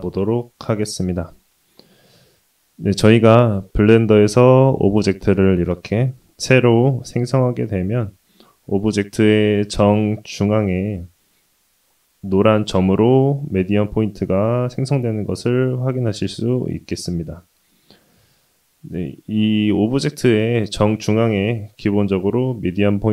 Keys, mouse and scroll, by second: 6.8 middle click, 7.9 shift+middle click, 8.5 middle click, 12.8 s.